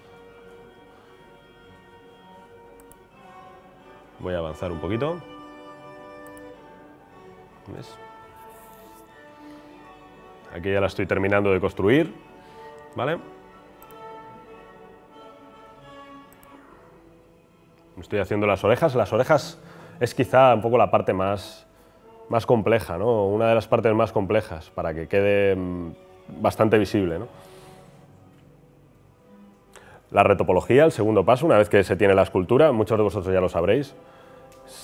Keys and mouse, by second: 0.0-0.4 drag, 0.6 ctrl+z, 0.8 drag, 1.3 middle drag, 1.4 click, 1.7-2.4 middle drag, 2.0 click, 2.0 right click, 2.4 ctrl+z, 2.4-3.0 drag, 2.6 middle click, 2.6 right click, 3.2 drag, 3.4 middle click, 3.6 click, 3.6 right click, 3.8 drag, 3.8 right drag, 4.2-4.8 middle drag, 4.4 click, 4.4-4.8 right drag, 5.0-5.7 middle drag, 5.3-6.1 drag, 5.3 right click, 6.7-7.6 middle drag, 7.6-8.5 drag, 7.6 right drag, 7.8 ctrl+z, 9.2 drag, 9.5 ctrl+z, 9.5 drag, 9.8-10.2 middle drag, 10.4 click, 10.9 middle drag, 11.2 drag, 12.0 drag, 12.3 ctrl+z, 12.3 middle drag, 12.5 drag, 12.8 middle click, 13.0-13.4 drag, 13.4 middle drag, 14.2 middle click, 14.4 click, 14.7 middle click, 15.4 3, 15.6 click, 16.1-16.6 drag, 16.3 middle drag, 16.3 right drag, 16.6 middle drag, 16.7-17.1 drag, 16.8 middle drag, 16.8 right drag, 17.1 middle click, 17.2-17.9 drag, 17.2-17.7 right drag, 18.0 drag, 18.3 middle drag, 18.5 drag, 19.0 click, 19.4 ctrl+z, 19.7 click, 20.1 click, 20.1 middle click, 20.1 right click, 20.4 click, 20.4 middle click, 20.4 right click, 20.6 ctrl+z, 20.8 drag, 20.8 middle drag, 20.8 right drag, 21.2-21.8 middle drag, 22.0 drag, 22.2 middle click, 22.6 ctrl+z, 22.8 click, 23.0-23.8 middle drag, 23.8 ctrl+z, 24.2 ctrl+z, 25.0 ctrl+z, 25.5 ctrl+z, 25.8 ctrl+z, 26.3 ctrl+z, 26.4 ctrl+z, 27.2-27.6 middle drag, 27.6 click, 28.0 ctrl+z, 28.0-28.6 middle drag, 28.3-29.3 drag, 28.3 right click, 28.7 middle click, 28.7 right click.